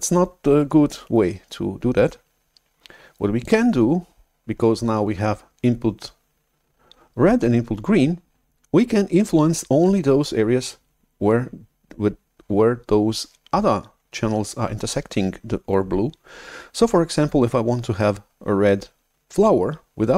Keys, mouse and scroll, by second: 3.4-5.9 drag.